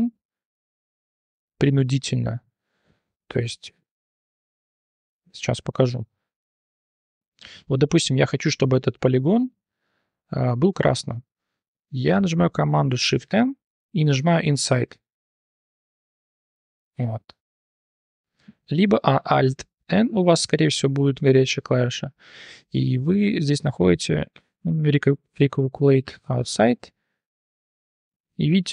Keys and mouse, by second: 0.2-2.3 drag, 5.2 a, 5.9 shift+n, 6.5 click, 6.9 3, 9.7 click, 13.0 shift+n, 14.5 click, 16.1 click, 16.8-18.4 drag, 18.6 alt+n, 28.0 click.